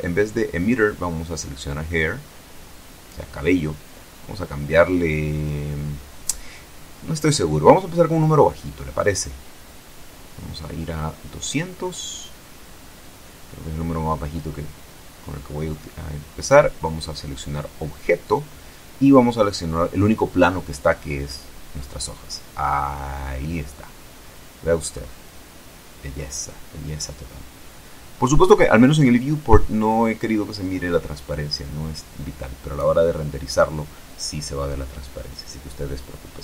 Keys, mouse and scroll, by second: 0.8 click, 3.3 click, 6.6-7.8 drag, 8.6 click, 10.3 KP_2, 10.5 KP_0, 10.8 KP_Enter, 15.6 click, 18.6 click, 20.7 click, 22.3 middle click, 22.4-26.9 drag, 27.0-28.3 scroll up 1, 30.9-32.3 scroll down 2, 36.1 click.